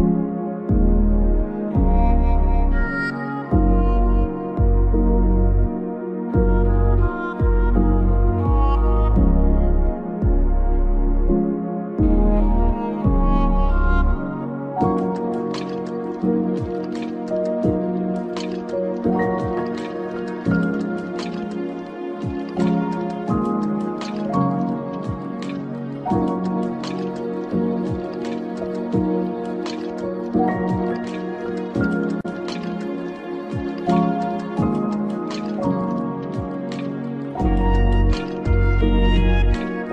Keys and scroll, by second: 13.3 Right, 16.8 Down, 17.1 Right, 18.7 Left.